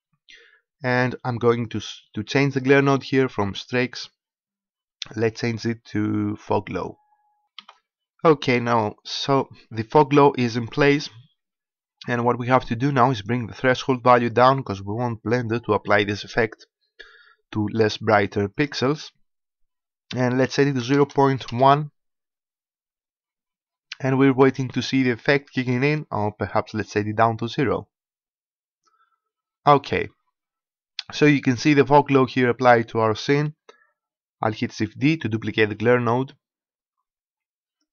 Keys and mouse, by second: 3.6-16.2 drag, 18.4-20.4 drag, 27.1-35.8 drag, 35.8 shift+d.